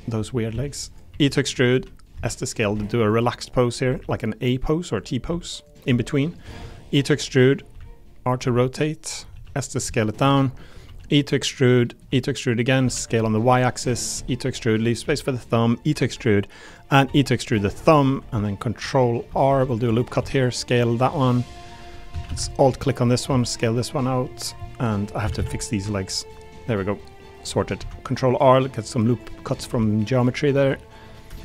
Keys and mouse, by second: 0.5 s, 0.9 click, 1.1 e, 1.6 click, 2.1 s, 2.5-3.5 drag, 3.5 r, 3.9 g, 5.2 s, 5.9 r, 6.3 click, 6.6 e, 7.2 click, 7.7 r, 8.3 click, 8.4 g, 9.1 click, 9.3 s, 9.7 click, 9.9 middle click, 10.6 middle click, 10.7 click, 10.8 e, 11.6 click, 11.8 middle click, 12.1 e, 12.8 s, 13.0 y, 14.1 e, 14.7 click, 15.0 e, 17.0 e, 17.6 click, 17.9 middle click, 19.0 middle click, 19.4 ctrl+r, 19.9 click, 20.2 s, 20.9 click, 22.1 a, 22.2 a, 22.5 alt+click, 24.6 middle click, 24.6 s, 25.2 a, 25.3 a, 25.6 alt+click, 27.8 ctrl+r, 29.4 click, 29.7 3, 30.5 click.